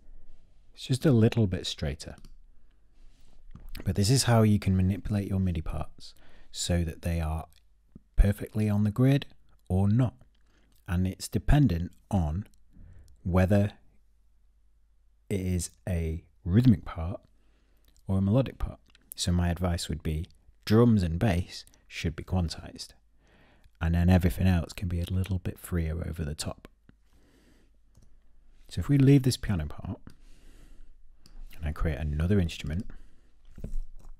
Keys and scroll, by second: 27.5 p, 33.6 i.